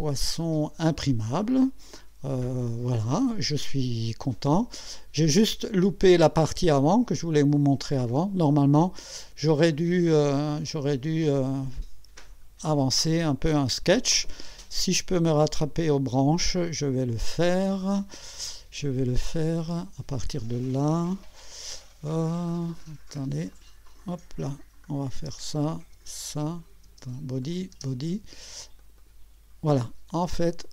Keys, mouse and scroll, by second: 0.4 click, 1.1-1.7 scroll down 2, 2.0-3.8 drag, 3.2 right click, 4.2 click, 6.3-7.0 drag, 8.2 click, 9.0-9.7 drag, 11.8 scroll up 1, 19.5 click, 22.5 click, 23.1 click, 23.5 click, 24.8 click, 25.2 space, 25.7 click, 26.0 space, 26.9 space, 27.4 click, 27.8 space, 28.8 click, 30.6-30.7 drag.